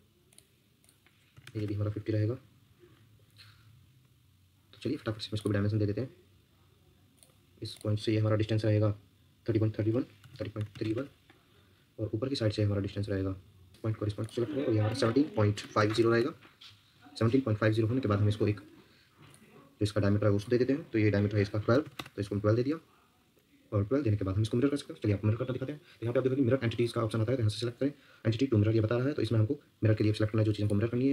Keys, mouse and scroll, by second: 1.1-1.9 typing, 9.9-11.2 typing, 14.6-16.4 typing, 21.5-22.4 typing, 26.0 Escape.